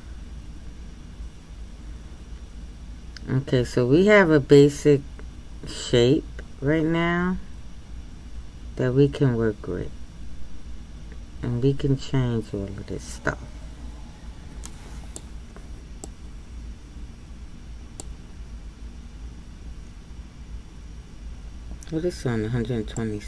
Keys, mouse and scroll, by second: 16.0-21.8 middle drag, 21.8-23.2 scroll down 1, 23.2 click.